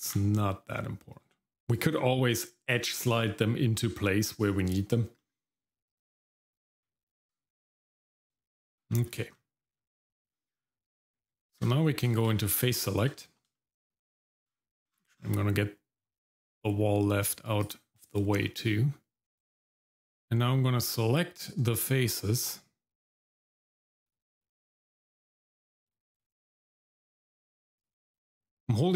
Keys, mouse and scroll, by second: 0.1 ctrl+b, 1.5-1.8 scroll up 1, 5.2 middle click, 7.0-7.4 scroll down 1, 7.4 Tab, 8.0 scroll down 1, 8.4 shift+middle click, 8.9 middle click, 9.3 scroll up 1, 9.7-10.0 scroll down 1, 10.1 shift+middle click, 10.5-11.2 scroll up 2, 11.2 Tab, 12.2 shift+z, 12.7 shift+middle click, 13.5 shift+middle click, 14.4-16.7 scroll down 6, 17.6 click, 17.9 middle click, 17.9-18.4 scroll up 2, 18.4 middle click, 20.8 click, 23.0-23.5 scroll up 1, 24.1 ctrl+click, 25.9 shift+click, 27.8 ctrl+click, 28.4 scroll down 2, 28.6-28.9 scroll up 2.